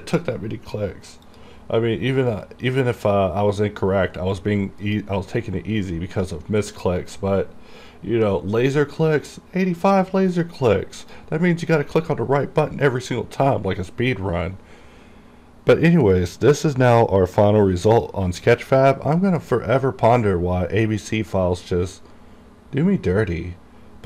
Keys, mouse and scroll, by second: 1.4 click, 5.0 click, 10.5 click, 13.3 click, 18.0 click.